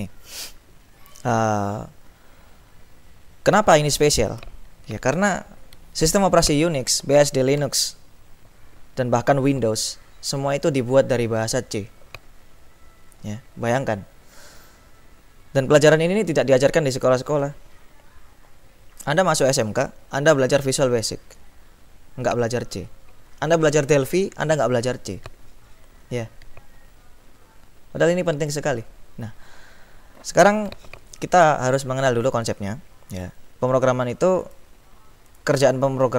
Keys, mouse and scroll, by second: 34.7 click, 35.4 click.